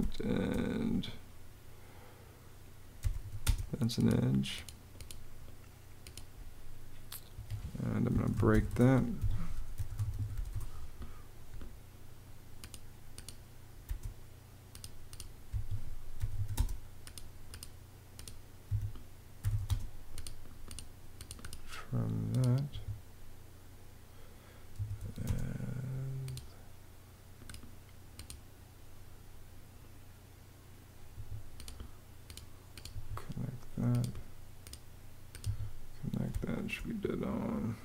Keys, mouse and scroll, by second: 2.5-3.4 typing, 7.0 Escape, 7.5-10.5 typing, 8.9 Escape, 13.5 space, 15.2 Escape, 15.6-16.5 typing, 18.3 Escape, 18.8-19.7 typing, 22.4 Escape, 24.2-25.1 typing, 30.8 Escape, 32.6 Escape, 36.0 space, 37.6-37.8 typing.